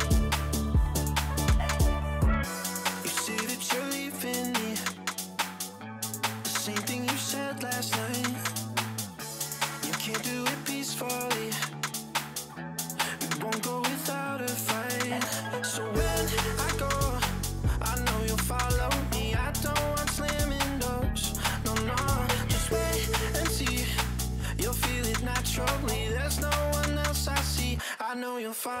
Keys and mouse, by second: 0.4 click, 1.1 middle click, 1.5 middle click, 1.8 shift+a, 4.8 middle click, 5.2 click, 5.8 click, 7.1-7.7 drag, 8.2-9.1 drag, 9.5 middle click, 10.2 middle click, 11.4 KP_1, 12.3 z, 12.8 shift+click, 13.4 click, 14.1 click, 14.6 middle click, 15.1 click, 16.3 click, 19.3 click, 20.2 click, 21.3 click, 22.6 click, 24.2 middle click, 24.8 middle click, 26.3 click, 26.8 click, 28.3 click.